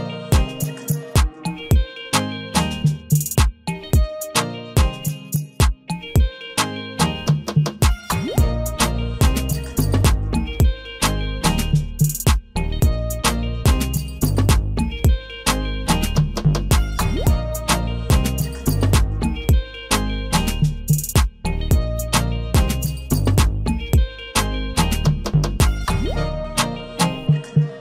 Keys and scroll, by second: 6.8 Delete, 11.3 ctrl+j, 25.2 ctrl+g, 25.8 ctrl+a.